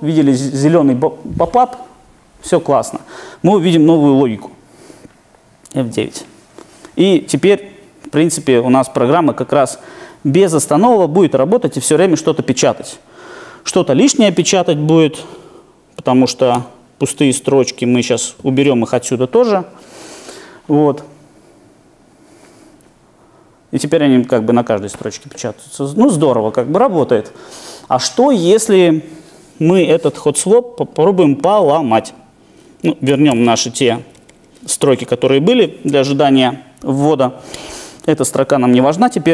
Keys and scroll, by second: 5.8 alt+super+r, 10.3 alt+super+r, 16.5 super+/, 18.6 shift+super+F9, 33.1 super+/.